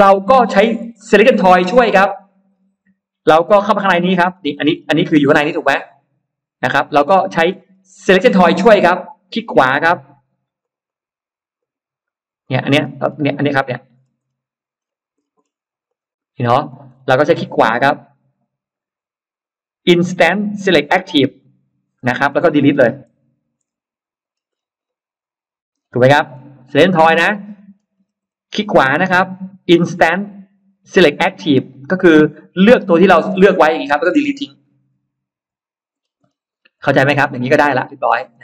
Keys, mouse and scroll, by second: 0.3 middle click, 0.5 middle click, 2.0 click, 2.4 middle click, 3.2 click, 3.5 click, 3.9-4.7 scroll down 2, 4.8-7.3 middle drag, 7.5 scroll up 1, 8.5 scroll up 1, 9.3 right click, 10.5 click, 10.7 click, 11.4 right click, 12.3 click, 12.6 middle click, 12.6-12.9 scroll down 1, 13.3 click, 13.8 middle click, 13.8-14.1 scroll down 1, 14.7-15.0 scroll up 2, 15.0-15.3 scroll down 2, 15.7 click, 16.5-16.8 scroll up 2, 17.0 scroll up 2, 17.4 click, 18.0 right click, 21.3 click, 21.9-22.9 scroll down 4, 23.5-24.9 scroll up 6, 25.6-25.9 scroll down 2, 25.9 scroll up 2, 26.6 click, 26.9-27.3 scroll up 2, 27.4 middle click, 27.7 scroll down 2, 28.1 scroll up 2, 28.5 right click, 33.2 click, 35.3 Delete, 35.8 middle click, 36.4 middle click, 37.2 Escape, 37.6 middle click, 37.8 Escape, 38.2 middle click.